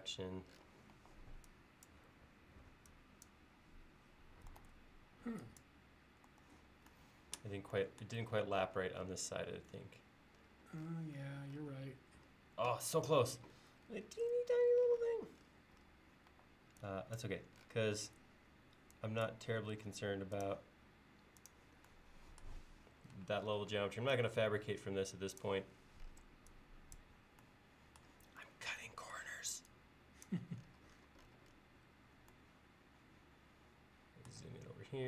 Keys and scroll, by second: 1.0 e, 4.6 super+z, 6.4 super+z, 16.3 e, 19.7 l, 23.8 e, 32.0 l, 34.9 e.